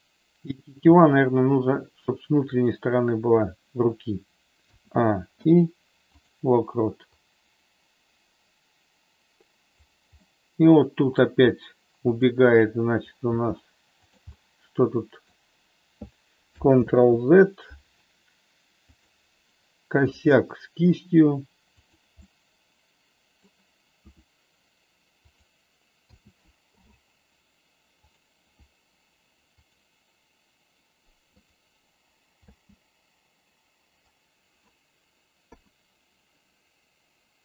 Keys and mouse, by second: 0.9 r, 2.5 click, 4.6 a, 5.4 i, 7.1-9.8 drag, 10.2 middle click, 12.0 click, 13.2 g, 14.0 click, 14.2-15.2 middle drag, 16.8 ctrl+z, 18.9 click, 20.0 r, 21.8 click, 22.1-23.4 middle drag, 24.0 r, 25.2 click, 26.0 a, 26.6 i, 29.5 click, 31.4 click, 32.5 space, 35.4 KP_3.